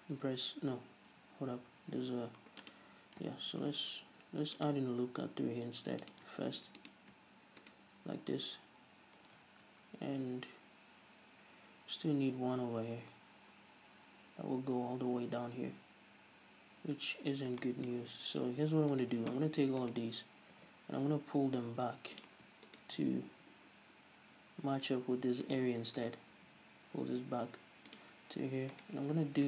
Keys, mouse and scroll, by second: 1.4 z, 3.8 ctrl+r, 6.4 click, 6.7 ctrl+r, 8.0 right click, 13.4-16.0 scroll down 1, 17.3 scroll up 1, 17.9-19.2 shift+middle drag, 19.2-20.8 right drag, 20.8 g, 22.5 click, 22.9 shift+right click, 23.5 g, 25.8 click, 26.2 right click, 26.6 g, 29.0-29.4 right drag.